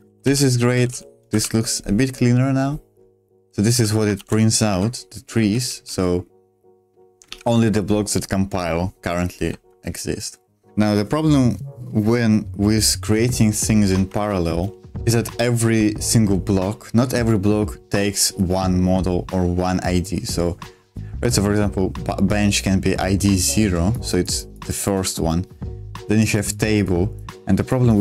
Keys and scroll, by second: 0.0-5.2 typing, 5.4 super+2, 7.3 super+1, 9.4-10.7 typing, 10.7 super+2, 10.7 super+1, 13.7 super+2.